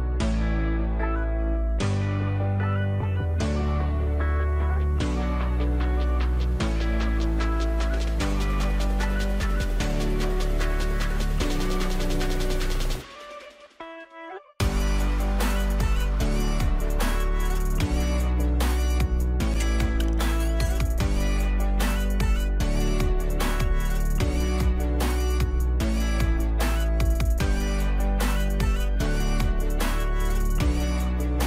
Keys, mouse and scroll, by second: 3.8 typing, 5.9-17.0 drag, 18.5 click, 20.0 alt+click, 21.0 ctrl+click, 22.9 click.